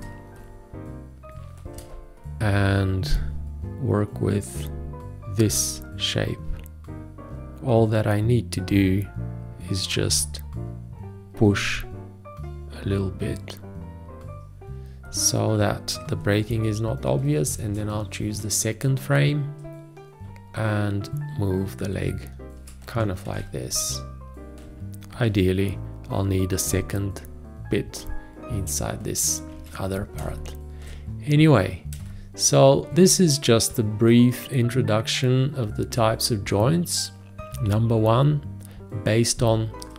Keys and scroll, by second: 1.9 ctrl+space, 2.3 v, 17.4 shift+., 19.6 g, 23.2 ctrl+a, 25.3 v, 29.5 ctrl+a, 30.2 space, 32.0 space.